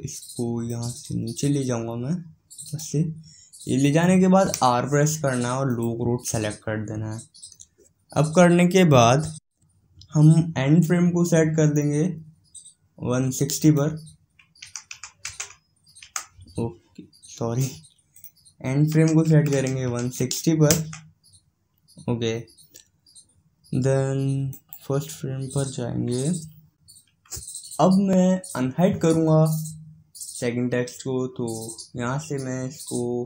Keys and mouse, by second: 1.2-3.0 drag, 14.1-16.0 drag, 18.7-20.5 drag, 25.1-26.8 right drag.